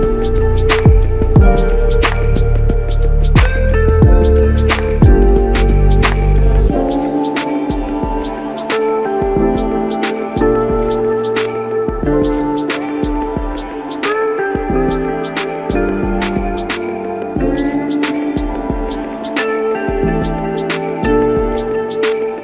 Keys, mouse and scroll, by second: 2.8 alt+click, 6.3 alt+click, 7.7 alt+click, 12.9 alt+click, 20.7 alt+click, 22.2 alt+click.